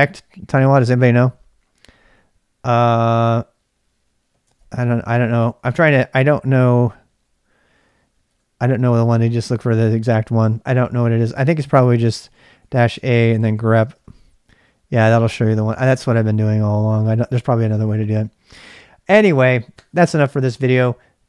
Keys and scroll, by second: 2.8-6.3 typing, 8.3 typing, 10.1-15.8 typing.